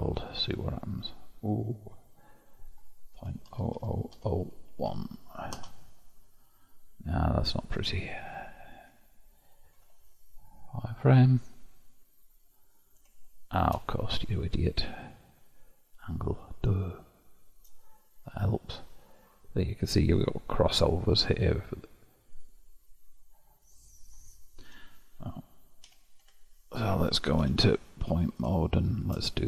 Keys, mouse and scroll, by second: 0.6-3.8 drag, 3.8 0, 7.5-9.8 drag, 9.8 alt+v, 11.7-14.6 middle drag, 14.6-17.0 drag, 17.0-18.3 shift+middle drag, 18.3-20.1 scroll up 1, 20.1-21.3 scroll up 1, 22.4 click, 23.2-24.7 middle drag, 24.7 1, 25.9 2, 26.3 Tab, 27.5 1, 28.7 shift+middle click.